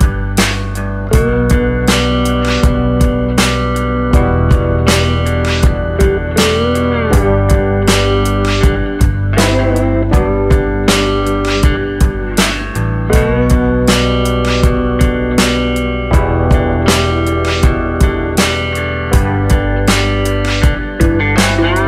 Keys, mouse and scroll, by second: 0.6 middle click, 2.3 alt+click, 3.3 alt+click, 4.1 alt+shift+click, 4.7 alt+shift+click, 5.3 middle click, 6.2 alt+shift+click, 6.7 alt+shift+click, 7.1 middle click, 8.7 g.